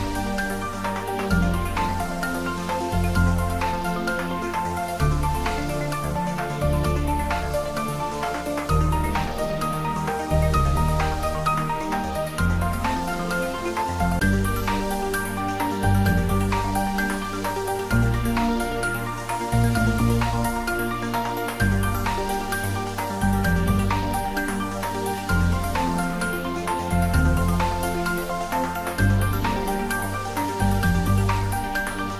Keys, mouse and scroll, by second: 0.3 middle click, 1.4 click, 2.4 scroll down 1, 3.0-5.0 typing, 7.5 click, 7.9 ctrl+z, 8.8 shift+d, 9.2 r, 10.4-11.3 typing, 11.5 click, 12.3 ctrl+z, 13.4 r, 14.4 click, 14.7 ctrl+z, 15.2 scroll up 1, 16.1-17.8 middle drag, 17.8 shift+d, 18.2 r, 20.5 click, 21.0 scroll down 1, 24.3 3, 24.9-26.6 scroll down 1, 26.7 r, 28.2 click, 31.9 r.